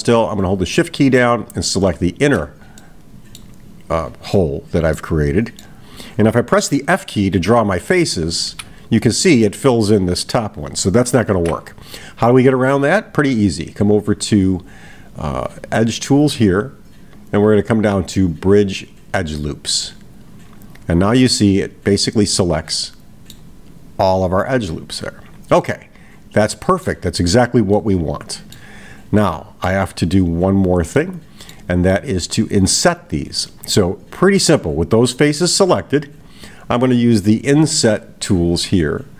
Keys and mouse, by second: 2.8 middle click, 4.9-5.7 middle drag, 21.3-23.5 middle drag, 25.6-26.9 middle drag, 27.8-28.7 middle drag, 29.2 middle click, 31.0 middle click.